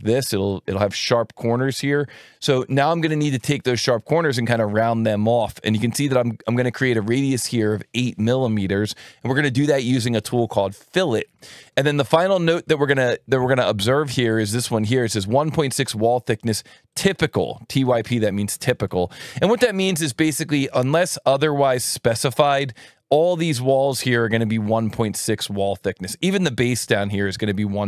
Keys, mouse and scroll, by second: 14.1 click, 15.5 click, 16.9 click, 27.0 click.